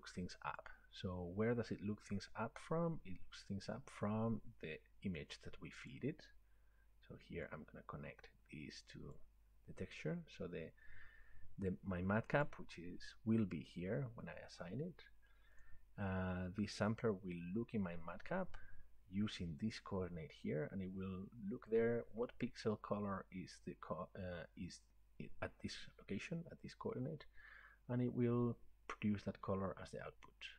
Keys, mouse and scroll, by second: 0.6 click, 5.9 click, 9.1 click, 12.5 click, 15.6 click.